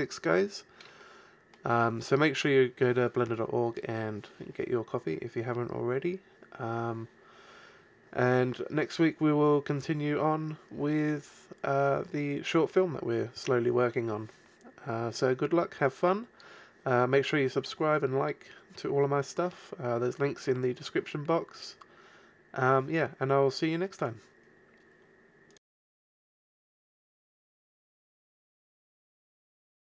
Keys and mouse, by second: 0.0 Escape, 1.7 a.